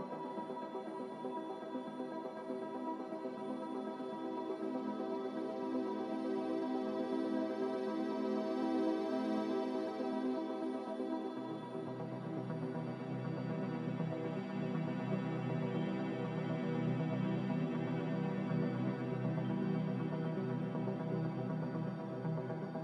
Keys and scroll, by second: 6.4 z, 12.4-13.2 typing, 19.8-20.6 typing.